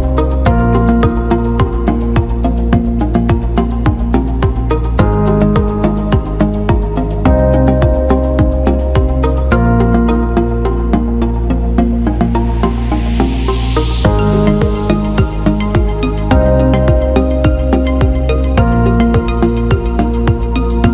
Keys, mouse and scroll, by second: 0.1 alt+shift+middle click, 0.5 middle click, 4.5 click, 7.3 click, 8.2 click, 11.0-12.3 drag, 12.4-17.3 drag, 18.4-20.9 drag.